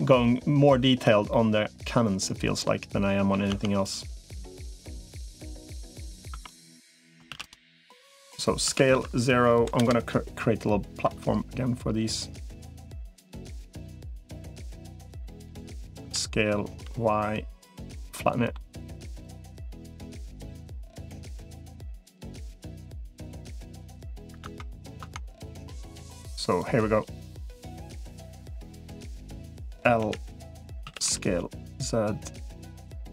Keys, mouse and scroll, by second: 1.1-3.1 middle drag, 3.4 Tab, 4.7 middle click, 5.8 click, 6.2 Tab, 7.2 shift+d, 7.8 click, 8.4 s, 10.8 e, 14.0 middle click, 14.8 click, 15.0 middle click, 15.8 s, 17.9 middle click, 19.6-20.8 drag, 21.0 middle click, 21.8-23.6 drag, 23.8 middle click, 24.2 Tab, 24.8 Tab, 25.3 middle click, 25.8 click, 26.4 click, 27.4-28.6 middle drag, 29.2 click, 29.8 l, 30.6 s, 32.2-33.1 drag.